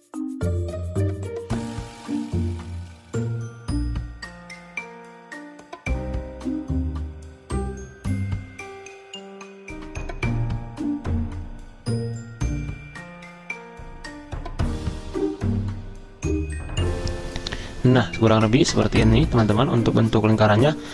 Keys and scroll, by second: 2.5 ctrl+z, 10.3 z, 11.5 v, 13.4 ctrl+z, 14.4 z, 14.7 v.